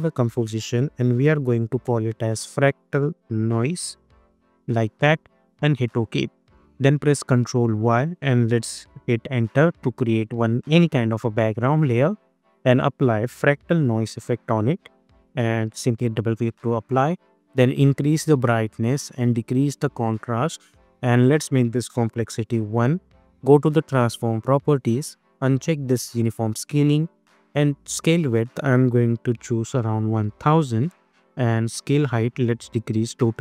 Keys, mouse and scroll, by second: 1.4-5.0 typing, 5.4 Return, 7.0 ctrl+y, 9.2 Return, 12.2 click, 12.8 ctrl+a, 13.2-14.4 typing, 15.8-21.2 drag, 22.3 Return, 24.0 click, 26.1 click, 30.7 Return, 31.7 click, 31.9-33.4 drag.